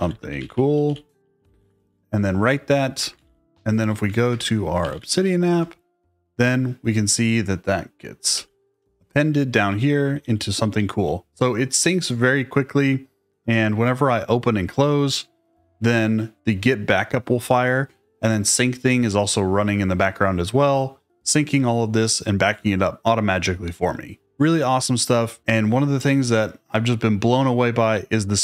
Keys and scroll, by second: 0.0-5.3 typing, 4.3 super+space, 5.4 Return, 8.3 shift+g, 9.6-10.9 typing, 13.0 typing.